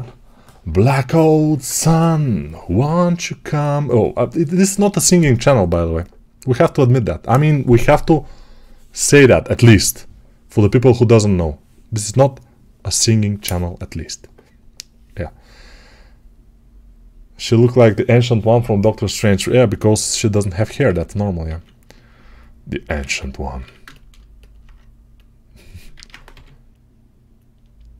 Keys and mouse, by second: 21.4 alt+q, 26.2 g.